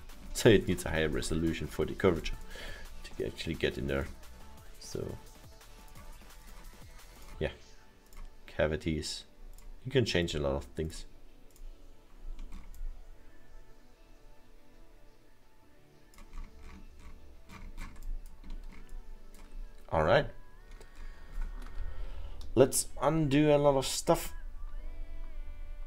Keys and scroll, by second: 21.7 ctrl+z, 22.3 ctrl+z, 23.2 ctrl+z, 23.5 ctrl+z, 23.8 ctrl+z, 24.0 ctrl+z, 24.9 ctrl+z, 25.7 ctrl+z.